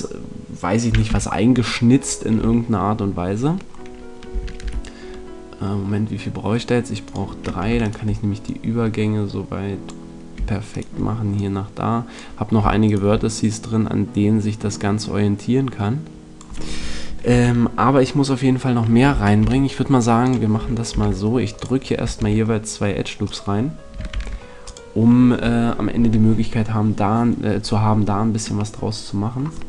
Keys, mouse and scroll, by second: 1.0 f, 2.3-4.0 middle drag, 2.3 a, 4.6 ctrl+r, 7.0 click, 9.1 click, 9.1-10.2 right drag, 10.0 click, 14.8 click, 17.2 a, 19.4 ctrl+r, 20.2 click, 21.8 ctrl+r, 22.1 ctrl+r, 24.0 ctrl+r, 25.2 a.